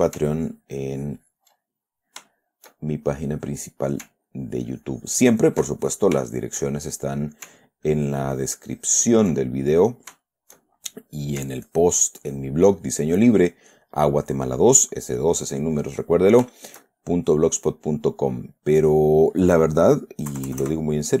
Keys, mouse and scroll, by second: 0.8-2.6 ctrl+drag, 2.6 ctrl+shift+middle click, 2.8-4.4 shift+drag, 4.6-5.8 ctrl+drag, 6.0 ctrl+click, 6.6-7.7 ctrl+shift+drag, 7.7 middle click, 8.2-9.7 ctrl+drag, 10.0-11.1 ctrl+middle drag, 11.4 click, 12.0-13.0 ctrl+drag, 13.1 ctrl+middle click, 14.1 click, 14.9 middle click, 15.6 click, 16.4 middle click, 16.9 shift+middle click, 18.0 shift+middle click, 18.8 middle click, 19.8 middle click, 20.7 KP_Add.